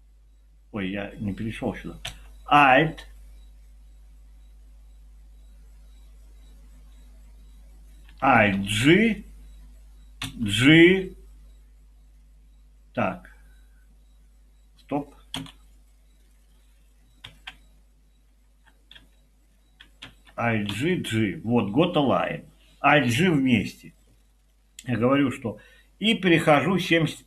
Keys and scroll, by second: 8.6 g, 10.2 g, 15.4 Escape, 20.0 alt+g, 20.7 g.